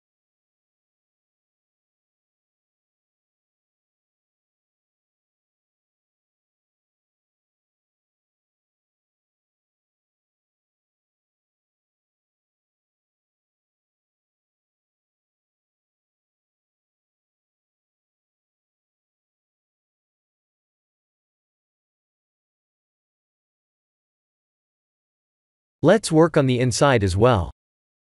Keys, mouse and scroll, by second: 1.9 e, 4.5 e, 5.6 e, 9.4 e, 11.3 e, 14.6 n, 16.3 click, 17.1 click, 19.1 Tab, 25.8 Tab, 27.1 g.